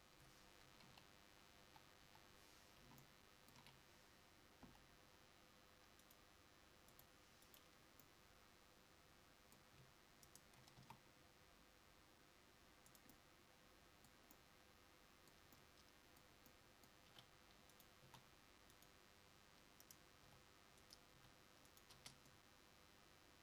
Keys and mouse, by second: 0.9 KP_1, 1.8 KP_5, 4.3 KP_5, 4.7 l, 8.1 click, 13.3 s, 20.3 g, 20.3 s, 21.2 g, 22.1 Tab.